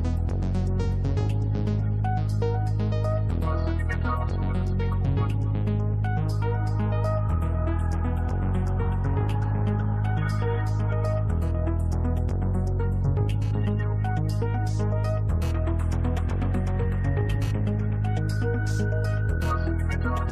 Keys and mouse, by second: 4.0-6.8 drag, 7.2-8.7 drag, 9.1-10.5 drag, 13.0 click, 14.5 click, 15.9-17.7 drag.